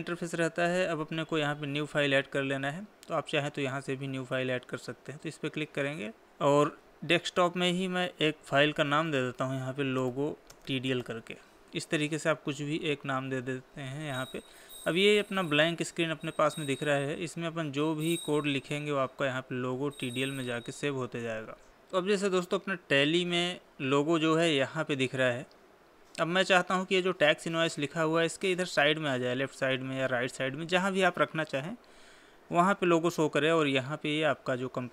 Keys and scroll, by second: 11.0 space.